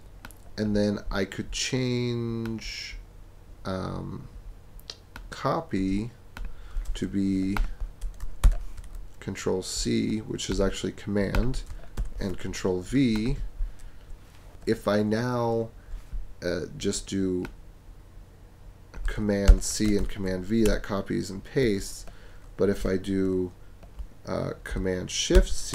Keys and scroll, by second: 8.4 super+c, 12.0 super+v, 19.5 super+c, 20.0 super+v, 20.6 super+BackSpace, 21.3 BackSpace, 25.3 shift+super+c.